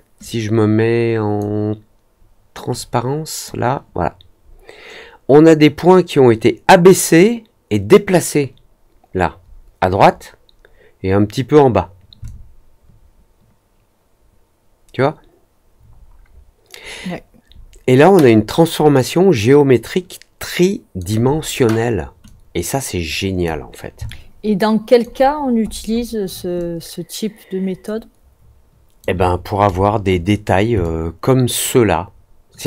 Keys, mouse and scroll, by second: 0.1-1.3 drag, 2.7 click, 12.2-20.9 alt+drag, 22.2-23.4 drag, 24.0 alt+click, 25.2 alt+middle click, 25.2-26.1 alt+scroll up 3, 25.6 alt+middle click, 25.9 alt+middle click, 26.5-28.9 alt+drag, 30.7-32.6 alt+drag.